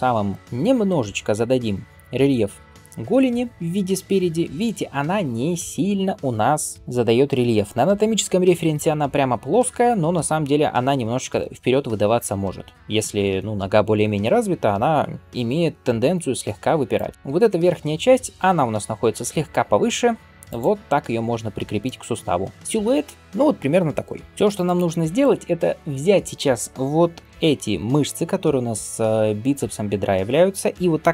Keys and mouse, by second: 16.8 click, 16.9-24.2 middle drag, 17.1 g, 22.5 Tab, 24.2-31.1 drag.